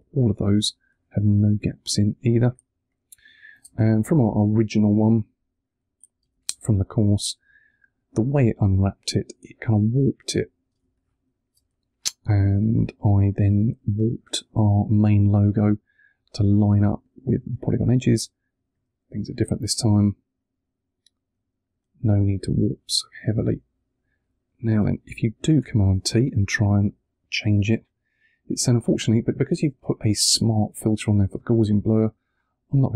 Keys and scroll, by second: 3.9 super+`, 6.1 space, 6.7 super+space, 10.6 space, 11.1 super+space, 25.5 super+t.